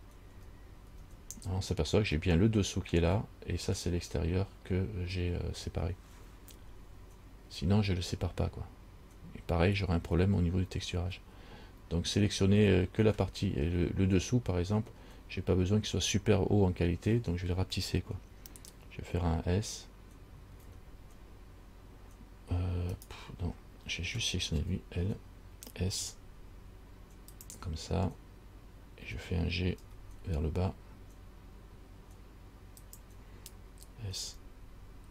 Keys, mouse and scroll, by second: 0.5 a, 1.1 a, 20.8 s, 24.8 l, 26.2 s, 30.0 g, 34.4 s.